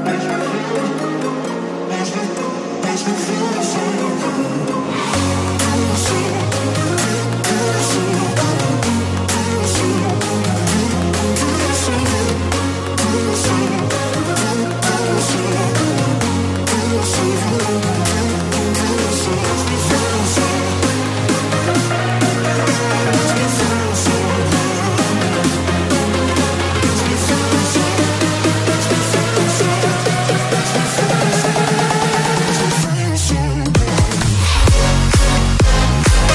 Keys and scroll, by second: 1.6 space, 10.5 space, 21.2 space, 26.8 space, 32.3 space.